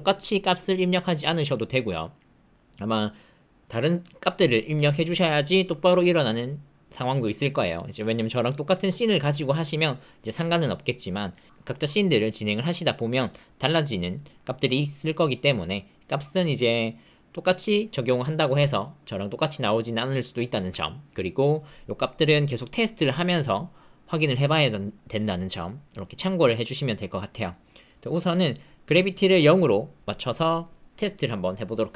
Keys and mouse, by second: 28.0 middle click, 29.2 click.